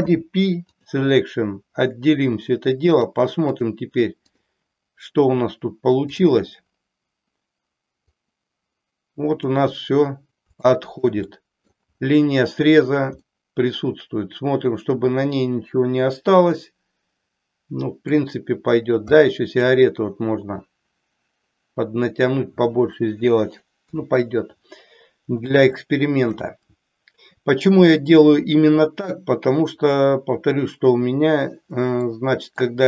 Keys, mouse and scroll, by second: 0.0 p, 2.9 click, 4.4 click, 8.0-9.5 drag, 10.7-11.2 shift+middle drag, 11.3-11.8 middle drag, 13.4-18.2 middle drag, 19.2 middle click, 23.8 KP_3, 25.8-26.5 shift+middle drag, 32.0-32.7 middle drag.